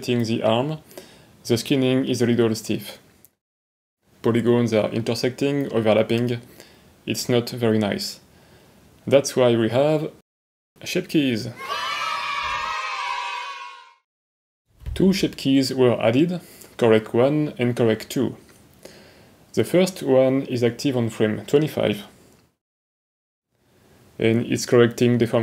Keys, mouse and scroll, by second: 1.7 r, 6.6 r, 10.2 r, 10.9 click, 14.5 click, 15.4 click, 16.0 click, 17.9 click, 21.1 click, 23.6-25.2 drag.